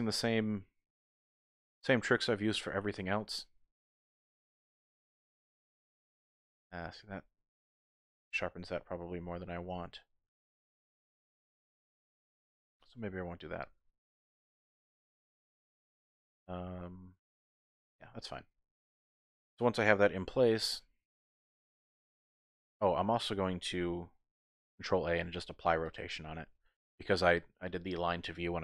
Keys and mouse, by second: 0.4 ctrl+b, 6.8 click, 7.2-8.4 middle drag, 8.4 Tab, 8.9 click, 10.3 Tab, 11.3 ctrl+z, 11.8 ctrl+z, 12.2 ctrl+z, 13.5-15.4 drag, 15.4-17.7 middle drag, 17.9 Tab, 18.4 middle click, 19.1 click, 20.2 g, 20.3 y, 22.1 click, 24.9 ctrl+a, 26.9 click.